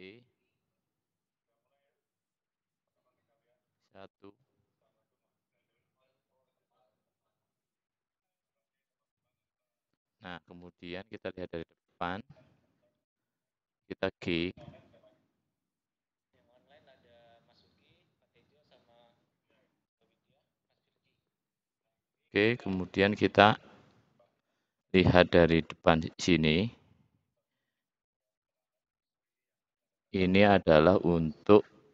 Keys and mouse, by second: 3.9 alt+click, 4.1 alt+e, 9.6 click, 10.6 `, 13.2 click, 14.5 g.